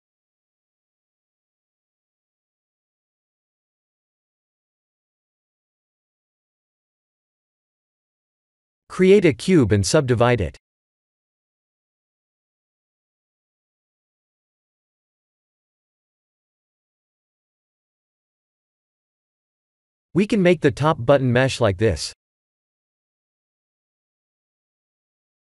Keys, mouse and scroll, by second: 1.6 middle click, 5.6-7.2 scroll down 3, 7.2 scroll down 1, 8.1 shift+middle click, 9.1 middle click, 9.8 click, 10.7 shift+a, 15.6-16.5 scroll down 8, 16.5 ctrl+3, 16.9 KP_1, 17.3 KP_7, 18.6 g, 19.6 shift+z, 19.9-20.9 scroll up 6, 20.9-21.3 scroll up 2, 20.9 g, 22.9 s.